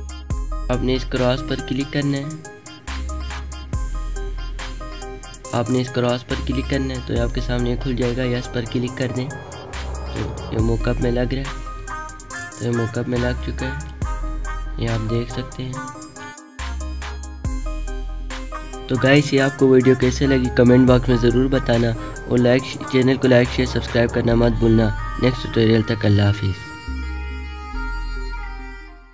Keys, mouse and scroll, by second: 3.8 alt+scroll up 1, 4.1-4.4 alt+scroll down 1, 10.1 click, 11.5 click, 11.6-11.9 alt+scroll up 1, 12.3 alt+scroll up 1, 13.0-15.2 typing, 13.1 click, 14.2 alt+scroll up 1, 14.9 click, 16.6 alt+scroll down 1, 17.7-18.1 alt+scroll up 1, 27.9 click.